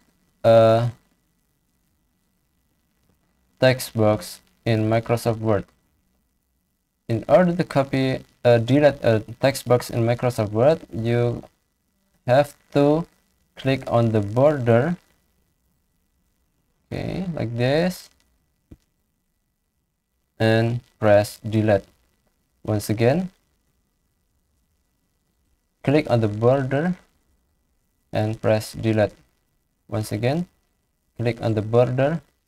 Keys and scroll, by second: 1.7 ctrl+c, 2.9 ctrl+v, 21.2 Delete, 22.6 ctrl+x, 24.1 ctrl+z, 28.4 Delete, 29.6 ctrl+z.